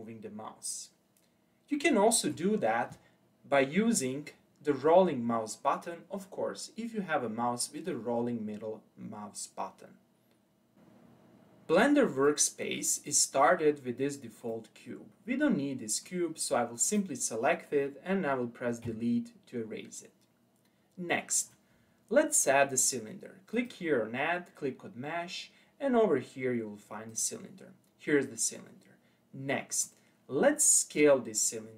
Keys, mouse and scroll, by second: 4.0-4.7 scroll up 3, 4.7-5.7 scroll down 4, 12.3-16.9 middle drag, 16.9 click, 18.9 Delete, 23.6-26.7 drag, 29.8-31.7 middle drag.